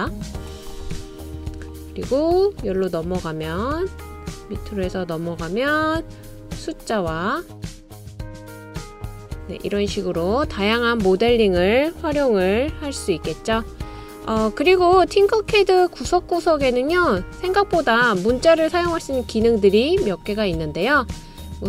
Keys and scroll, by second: 10.9 typing, 13.1 BackSpace.